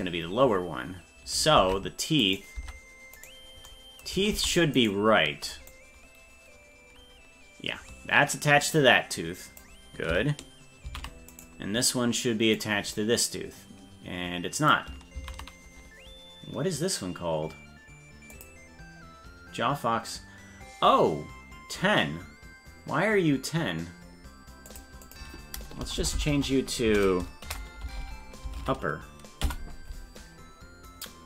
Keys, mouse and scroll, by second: 1.6 ctrl+Tab, 2.6 Tab, 3.3 right click, 4.4 ctrl+Tab, 4.8 right click, 5.7-9.7 drag, 11.0 ctrl+z, 11.4-12.4 right drag, 12.6-14.8 drag, 15.3 ctrl+z, 18.4 click, 24.7-30.0 drag, 26.0 BackSpace, 26.3 BackSpace, 28.0 p.